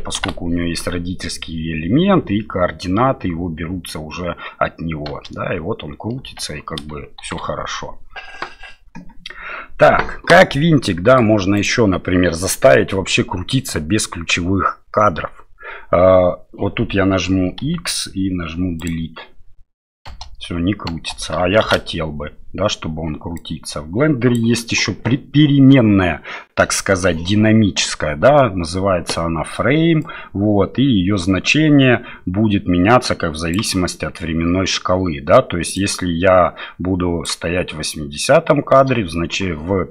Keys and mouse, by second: 0.0 shift+space, 0.3 shift+Left, 6.9 shift+space, 21.4 shift+space, 21.6 shift+Left, 23.4-24.4 drag, 30.0-33.5 drag, 35.7-37.2 drag.